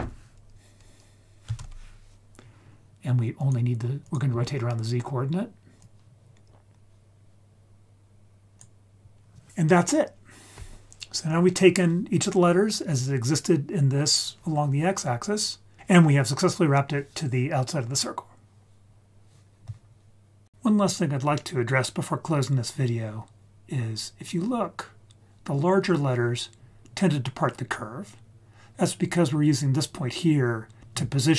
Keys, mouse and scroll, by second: 4.0 click, 4.3-4.7 scroll down 2, 4.7-5.8 scroll up 1, 5.8-8.6 drag, 5.8-6.2 scroll up 1, 23.8-27.5 scroll up 7.